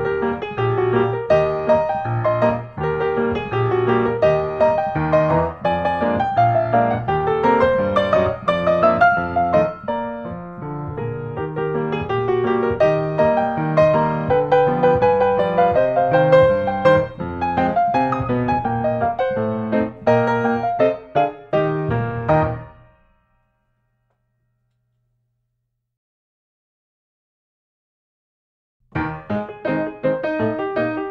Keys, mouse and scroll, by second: 0.0-0.6 scroll, 0.9 click, 2.5 click, 3.5 5, 4.0 Return, 6.3-7.4 drag, 9.0 middle click, 9.0-9.6 scroll, 10.8 click, 13.3 click, 14.7 click, 16.3 click, 17.8-19.0 drag, 19.6-20.6 drag, 20.8-21.2 typing, 22.7-23.4 typing, 24.8 Return, 30.5-31.1 middle drag.